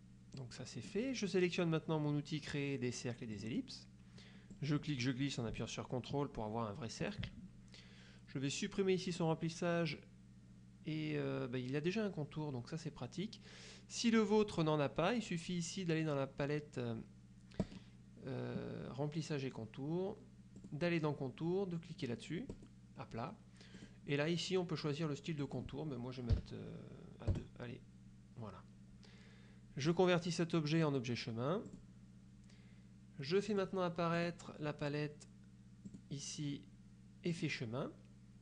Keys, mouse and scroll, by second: 0.5 click, 3.5 click, 4.6-7.4 drag, 9.2 click, 17.7 click, 20.7 click, 22.6 click, 23.9 click, 25.5 click, 26.5 KP_2, 27.4 KP_Enter, 29.9 click, 31.8 click, 33.6 click, 34.3 click, 36.0 click, 37.4 click.